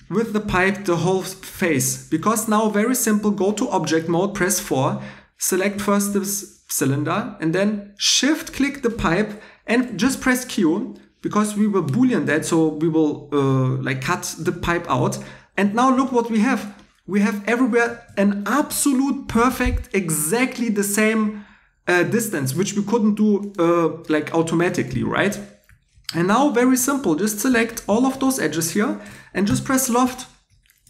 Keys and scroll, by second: 10.0 a, 18.1 2, 26.8 2, 29.4 l.